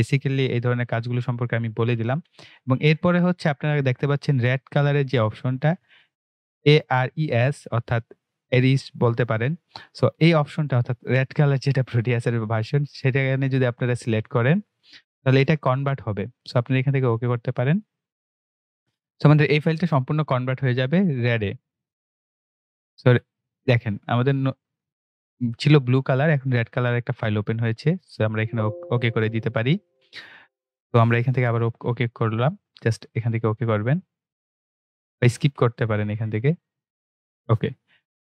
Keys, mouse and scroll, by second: 14.6 click, 28.2 click, 31.3 click, 36.4 click.